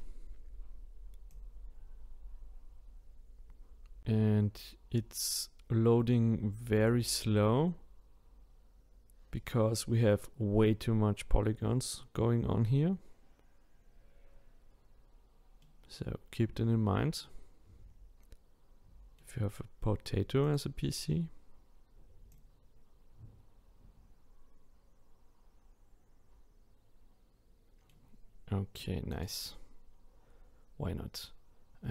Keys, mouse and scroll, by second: 15.6-18.6 middle drag, 20.4 click, 22.3 click, 29.1 click, 31.3-31.9 scroll down 5.